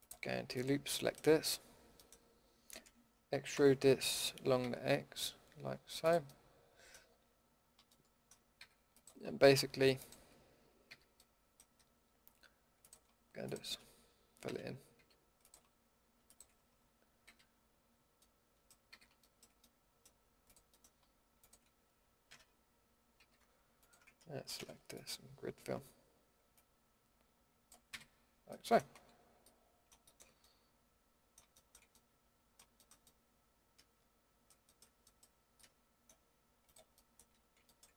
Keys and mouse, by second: 0.0-0.4 drag, 0.4-3.5 middle drag, 3.5 e, 8.2-8.9 drag, 8.5 a, 10.9 a, 14.4 f, 14.9 a, 17.2 f, 18.9 a, 22.3 f, 23.1 a, 24.5 ctrl+f, 27.9 a, 28.9 Tab, 33.1 middle drag, 33.7 middle click, 34.2 middle drag, 34.8 middle drag, 36.6-37.3 middle drag, 37.3 Tab.